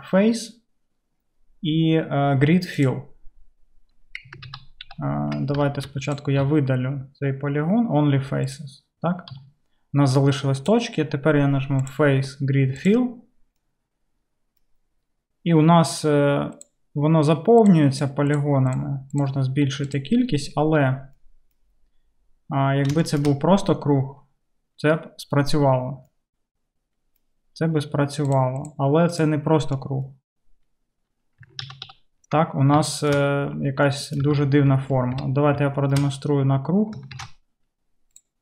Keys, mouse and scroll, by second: 4.5 ctrl+z, 4.9 ctrl+z, 5.9 3, 6.2-10.2 middle drag, 6.5 x, 9.4 1, 10.2-38.4 drag, 31.7 ctrl+z, 31.9 ctrl+z, 34.3 Tab, 35.2 KP_7, 37.3 shift+a.